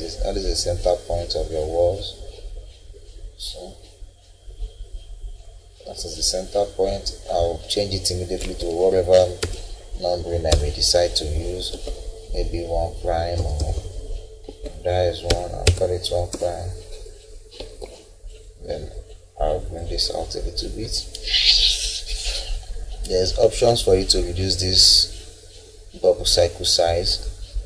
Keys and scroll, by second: 5.7 Escape, 8.4 1, 9.4 ', 10.5 BackSpace, 11.7 1, 13.4 BackSpace, 14.4 1, 15.3 ', 16.3 BackSpace, 17.6 Escape.